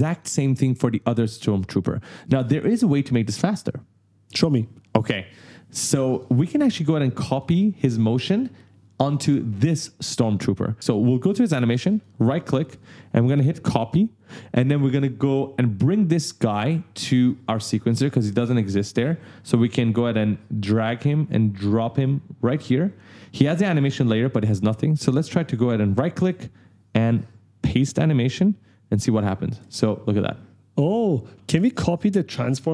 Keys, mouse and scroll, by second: 5.9 click, 6.4 right click, 6.5 w, 6.8 d, 11.2 click, 11.7 right click, 13.3 click, 16.7 click, 20.2 scroll down 1, 20.9 click, 22.9 scroll down 1, 24.3 click, 25.8 right click, 27.5 click, 29.0 click, 29.4 space.